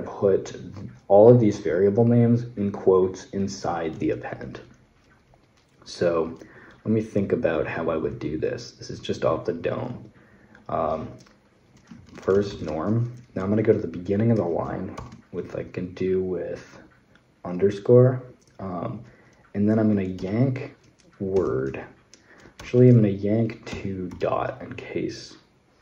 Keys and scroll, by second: 11.5-12.7 typing, 14.8 shift+-, 20.0 typing, 21.1 typing, 22.4 typing, 23.5-23.9 typing.